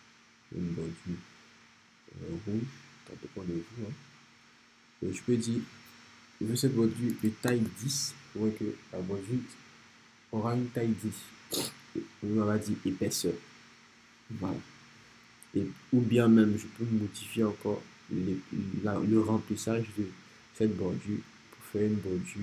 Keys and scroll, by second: 6.5-7.5 typing, 7.5 Return.